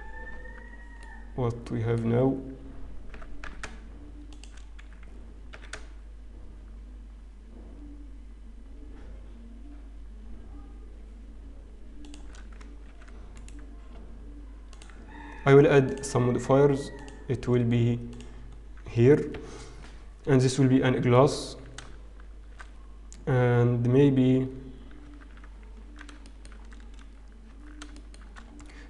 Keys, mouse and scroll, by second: 0.2 scroll up 1, 0.2 shift+z, 0.5 Tab, 0.9-1.3 scroll down 2, 1.3 middle click, 2.1-2.5 scroll up 1, 3.2 g, 5.5 s, 12.9 ctrl+1, 13.3 right click, 16.3 click, 16.9 click, 18.1 click, 18.5-18.9 scroll down 2, 19.3 KP_1, 19.7-21.1 scroll up 2, 27.0 Tab, 27.0 shift+middle click, 27.0-27.4 scroll down 3, 27.4-27.9 scroll down 1, 27.9 Tab, 27.9 shift+middle click, 28.5-28.8 scroll up 2.